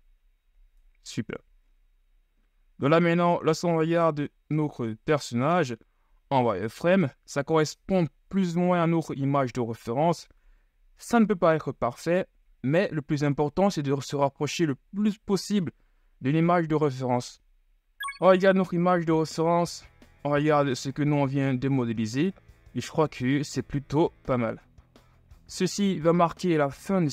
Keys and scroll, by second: 1.4 Tab, 4.7 KP_1, 6.3 z, 18.1 z, 20.5 z, 22.0 z, 22.9 KP_3, 24.2 KP_1, 24.9 z.